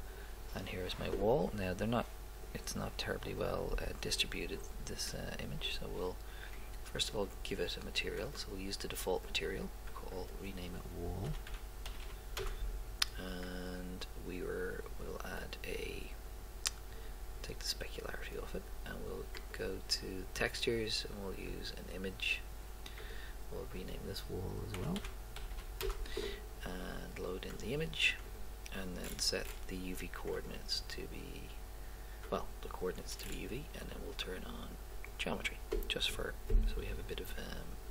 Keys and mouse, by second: 12.1 l, 15.0 middle click, 24.0-25.7 drag, 25.7 l, 27.6 click, 33.5 middle click.